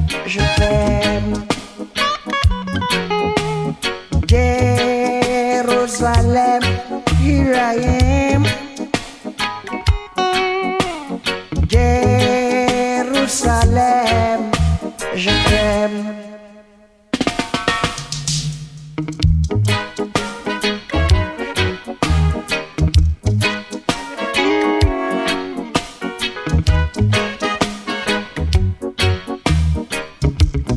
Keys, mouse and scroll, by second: 0.7 ctrl+click, 3.2 click, 12.5 ctrl+click, 15.9-29.9 drag, 30.1 ctrl+click.